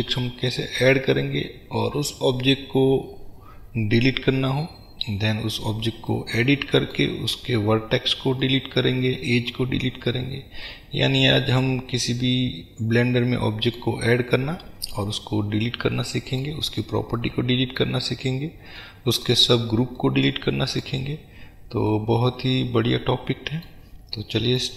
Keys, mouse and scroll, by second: 7.4-8.5 scroll up 2, 9.8-10.7 scroll down 2, 14.2-14.7 scroll down 2, 15.2-16.1 scroll up 2, 16.7-17.2 scroll down 2, 18.1-18.8 scroll up 2, 19.5-20.1 scroll down 2, 21.2-22.0 scroll down 2.